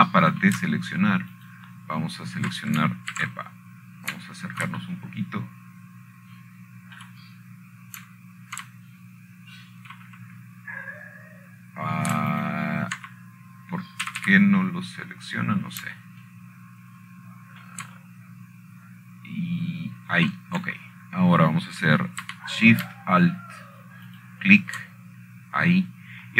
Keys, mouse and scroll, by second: 0.0 1, 1.8 scroll up 3, 2.3-3.3 scroll down 4, 2.7 typing, 4.1 alt+shift+click, 5.9 ctrl+z, 9.7-10.7 shift+middle drag, 11.8-13.6 shift+scroll up 2, 15.1 alt+shift+click, 16.8 a, 16.9 a, 17.6-18.2 scroll up 2, 18.2 scroll down 2, 18.7-24.3 ctrl+middle drag, 18.7-19.2 ctrl+scroll up 2.